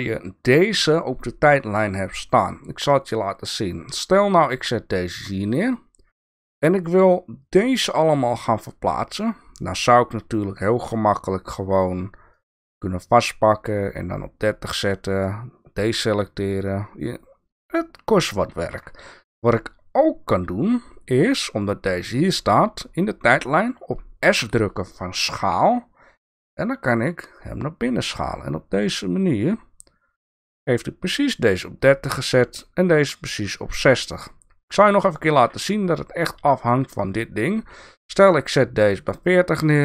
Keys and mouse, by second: 6.9-8.3 drag, 12.3-14.9 drag, 18.6 ctrl+z, 24.3 s, 35.1 ctrl+z, 37.0-39.1 drag.